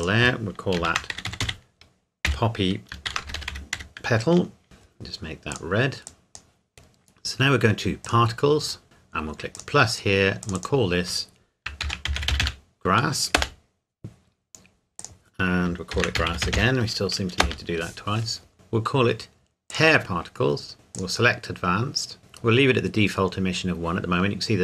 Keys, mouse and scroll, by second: 0.9-3.8 typing, 4.6 Return, 5.5 click, 8.0 click, 8.8-9.5 scroll up 1, 9.5 click, 11.8-12.4 typing, 13.4 Return, 15.0 click, 15.9-16.6 typing, 17.4 Return, 19.7 click.